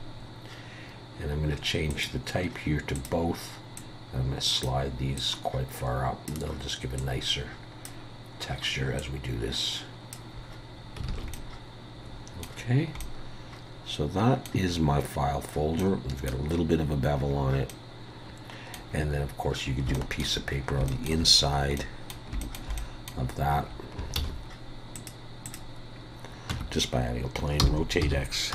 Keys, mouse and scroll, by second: 11.1 alt+a, 11.3 middle click, 12.7 scroll down 2, 13.0 middle click, 14.7-15.1 scroll up 3, 15.4 scroll down 2, 15.6 scroll up 1, 15.8 middle click, 16.6 scroll up 3, 17.2 scroll down 2, 17.7 middle click, 19.4 scroll down 1, 19.9 shift+middle click, 20.6 scroll up 2, 20.9 shift+middle click, 21.4 scroll down 1, 21.8 middle click, 22.4 shift+middle click, 22.8 middle click, 24.2 shift+a, 26.0 scroll down 2, 26.5 Tab, 27.6 r.